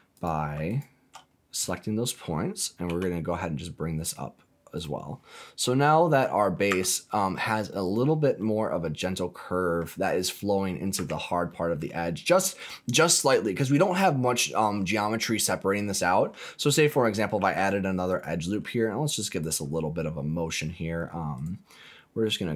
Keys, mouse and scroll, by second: 0.1 click, 0.6 alt+click, 2.8 g, 4.7 click, 6.7 Tab, 7.8 click, 8.4-9.8 middle drag, 10.9 Tab, 11.4 middle click, 16.0 middle click, 17.3 ctrl+r, 19.3 click, 21.3-22.5 right drag.